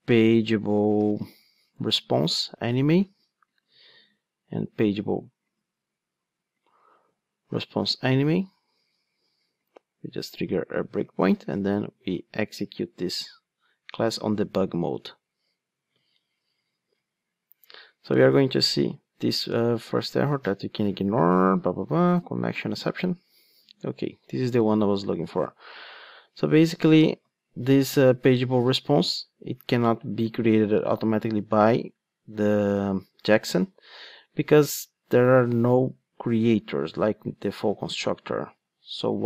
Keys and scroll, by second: 1.7 Return, 3.7 super+c, 6.9 super+v, 9.6 super+F8, 21.5 ctrl+d.